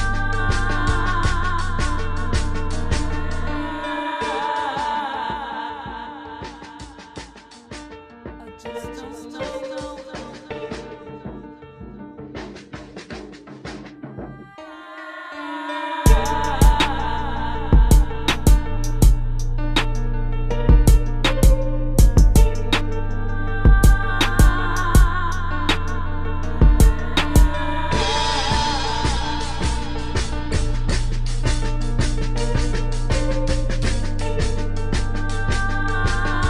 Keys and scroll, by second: 1.1 space, 4.9 space, 7.1 space, 10.5 space, 10.7 space, 11.4 space, 12.7 space, 13.4 space, 13.9 space, 14.6 space, 17.4 space, 19.7 space, 23.0 space, 24.0 space, 27.4 space, 27.8 space, 29.0 space, 30.3 space, 31.2 space, 33.1 space, 33.8 space, 35.5-36.4 typing.